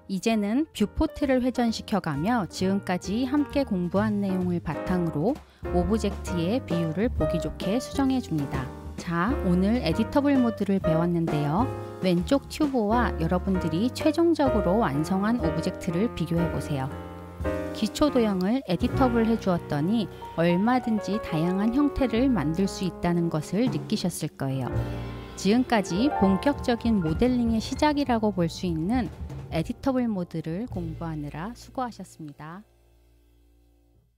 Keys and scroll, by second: 7.9 l, 9.6 u, 9.9 l.